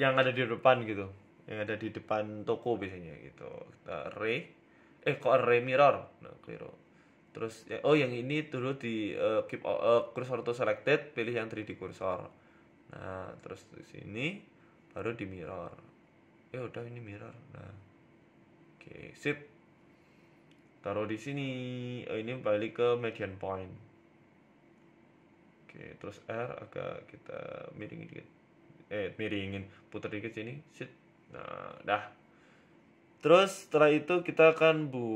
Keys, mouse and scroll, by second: 0.5 e, 1.9 Tab, 2.1 scroll down 3, 2.3 middle click, 3.0 KP_3, 3.9 click, 5.9 ctrl+z, 6.3 click, 7.7 Tab, 8.2 a, 9.2 click, 10.2 shift+s, 13.2 a, 13.9 r, 17.0 click, 18.3 click, 19.7 click, 19.9 middle click, 20.1 Tab, 20.4 middle click, 20.8 KP_3, 21.2 scroll down 4, 21.4 shift+middle click, 22.0 g, 22.7 s, 23.8 click, 24.5 s, 25.2 scroll up 4, 25.4 shift+middle click, 25.7 g, 27.3 KP_7, 27.8 z, 28.3 z, 28.9 shift+middle click, 29.1 scroll up 4, 29.6 g, 31.1 r, 32.7 KP_0, 32.9 z, 33.5 middle click, 34.1 KP_1, 34.4 z, 34.8 z.